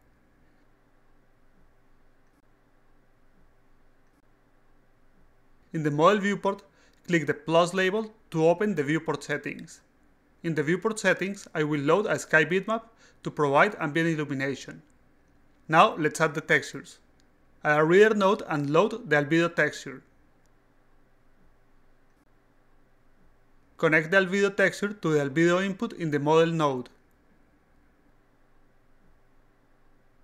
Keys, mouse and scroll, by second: 1.5 click, 2.4 click, 3.6 alt+click, 3.9 alt+right drag, 4.2 alt+middle click, 4.4 alt+right click, 7.2 right click, 9.4-10.5 drag, 11.4 click, 13.1 click, 13.3 click, 15.5 click, 16.2-17.5 alt+drag, 18.7 click, 19.1-20.5 drag, 21.6 click, 22.8 click, 22.9 click, 24.7-26.5 drag, 27.7 click, 27.9 click, 28.1 click, 28.8 click, 29.3 alt+click.